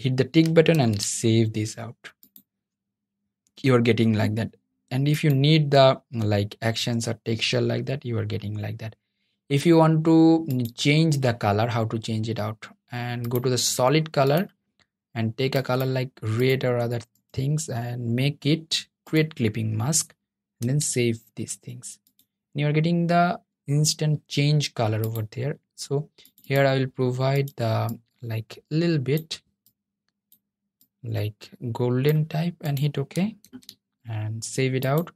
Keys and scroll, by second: 19.7 super+s, 32.5 super+s.